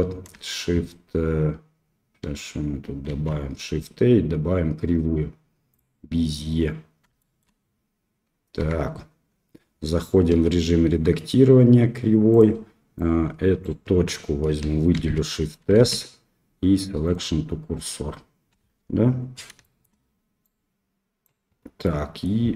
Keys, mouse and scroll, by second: 3.0 shift+a, 7.1 shift+middle click, 8.5 Tab, 10.3 s, 12.9 click, 14.9 shift+s, 18.5 KP_1, 19.6 shift+middle click, 20.4 click, 21.8 middle click.